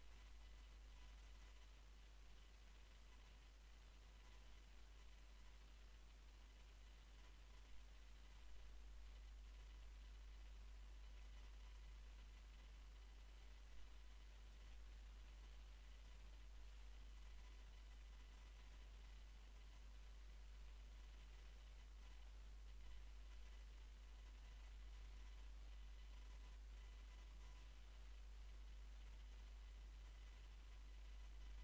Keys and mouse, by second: 0.5 Tab, 2.2 Tab, 8.7 middle click, 9.1-14.6 right drag, 16.5-18.7 middle drag, 18.7 c, 21.7-22.7 middle drag, 24.4 w, 26.5 x, 28.9-31.5 drag, 31.5 w.